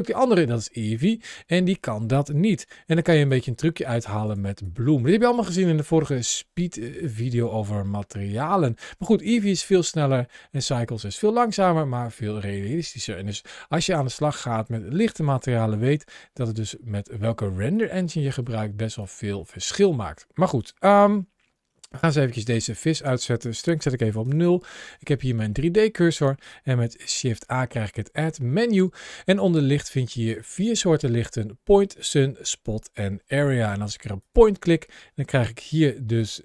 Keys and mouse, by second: 2.7 g, 3.1 click, 4.1 click, 4.5 click, 9.5-12.7 drag, 15.7 g, 16.2 click, 16.5 middle click, 17.2 g, 17.6 click, 18.0 middle click, 18.3 g, 18.8 click, 19.2-19.8 middle drag, 20.0 g, 20.4 click, 22.4 click, 23.2 click, 25.4-26.5 middle drag, 26.8 shift+a, 28.1 shift+a, 35.9 ctrl+shift+a.